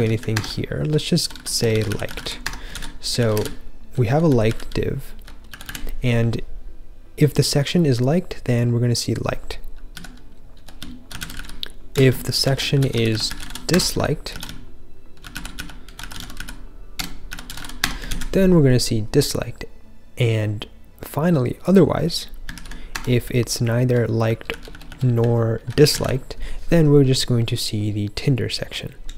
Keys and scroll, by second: 0.0-6.1 typing, 0.3 Escape, 2.7 super+s, 9.8-18.0 typing, 22.6 super+/, 22.8 Escape, 23.2-24.8 typing, 25.5 super+/, 25.9 super+s.